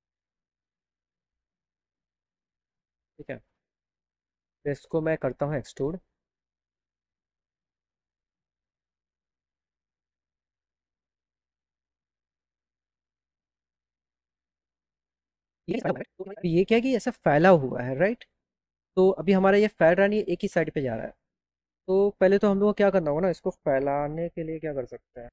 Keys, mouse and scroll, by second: 6.5 click, 9.7 click, 10.1 click, 10.8 click, 11.0 click, 11.3 click, 11.6 click, 12.1 click, 14.5-15.5 drag.